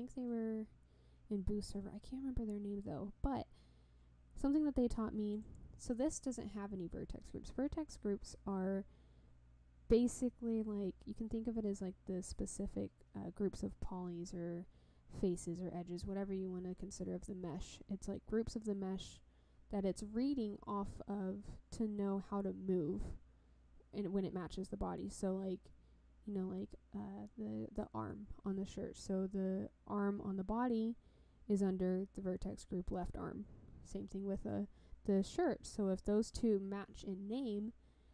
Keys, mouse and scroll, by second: 5.3 click.